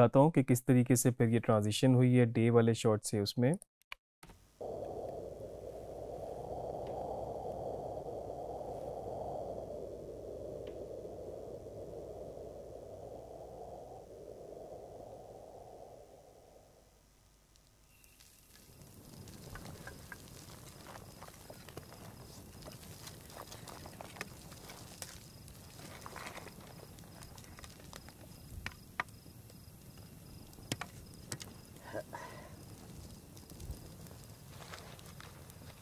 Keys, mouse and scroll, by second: 3.6 click, 4.3 space.